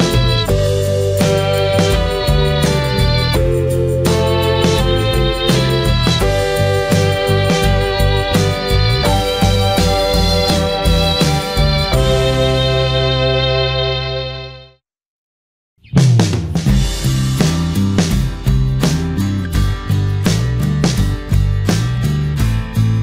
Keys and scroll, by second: 1.6 ctrl+j.